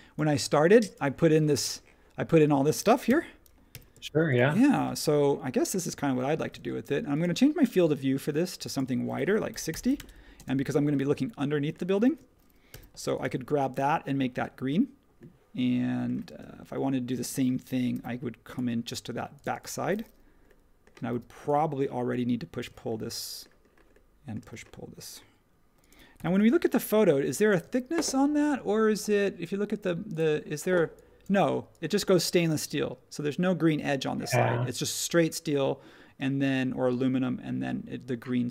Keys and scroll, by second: 2.4 space, 3.0 n, 3.7 b, 10.6-12.0 typing, 16.3 space, 17.9 r, 19.4 space, 21.1 p, 22.6 space, 24.4 space, 26.1 p, 27.6 space.